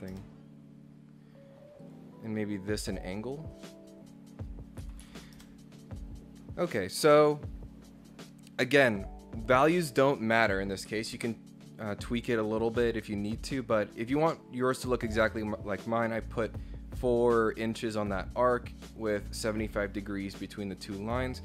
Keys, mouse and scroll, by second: 0.1 Return, 1.8 click, 3.0 click, 3.5 click, 5.4 Return, 10.9 Escape, 11.1 Escape, 12.5-18.2 drag, 19.2 click.